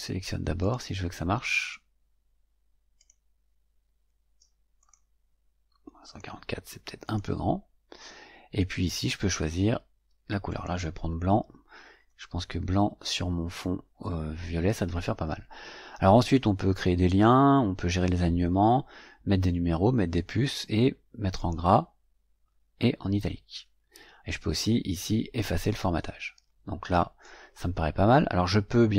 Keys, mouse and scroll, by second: 0.5 click, 1.5 click, 2.9 click, 4.7 click, 6.0 click, 7.0 click, 8.5 click, 10.4 click, 21.3 click.